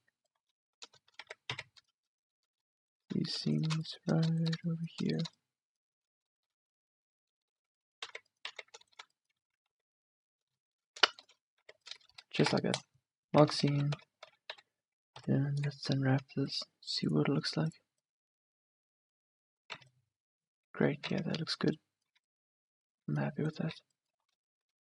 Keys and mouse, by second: 1.3 z, 1.6 z, 4.0-6.9 middle drag, 8.2 z, 8.6 z, 10.2 z, 11.6 z, 12.4 ctrl+e, 13.4 Tab, 13.7 a, 14.0 Tab, 14.3 a, 14.7 a, 15.3 u, 16.2 Tab, 19.9 Tab, 20.9 a, 21.2 Tab, 22.2 Tab, 23.2 Tab, 23.6-24.6 middle drag, 23.8 Tab.